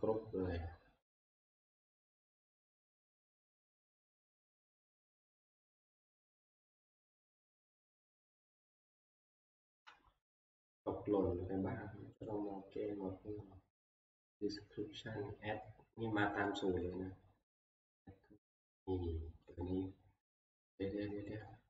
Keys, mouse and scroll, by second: 2.1 click, 2.7 right click, 4.4 click, 6.9 click, 8.7 click, 9.8 F11, 12.3 click, 16.7 click, 16.9 click, 19.6 click.